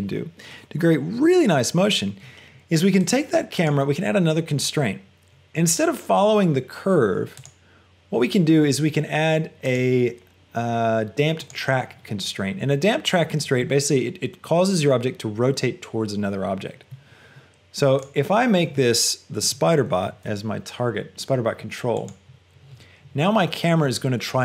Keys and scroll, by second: 19.7 s, 20.1 p.